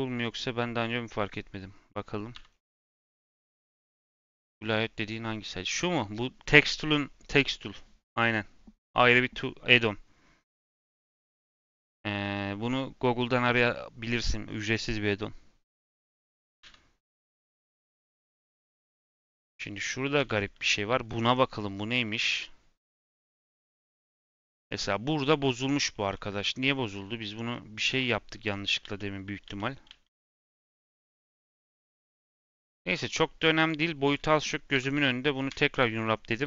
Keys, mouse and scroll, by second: 1.8 middle click, 2.3 n, 16.7 n, 17.7 a, 18.1 click, 18.8 middle click, 19.0 scroll up 1, 19.3 click, 20.1 l, 20.6 g, 21.7-22.0 scroll down 2, 22.0-27.8 middle drag, 27.8 ctrl+z, 28.8 ctrl+z, 30.2 ctrl+z, 31.1 ctrl+z, 31.9 s, 34.0 click, 34.7 l, 35.4 u.